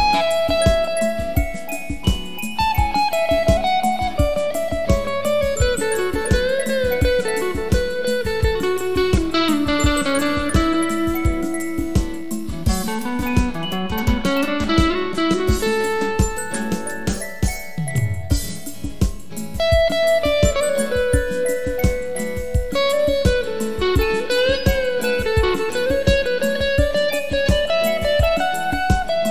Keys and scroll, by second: 8.6-14.8 typing.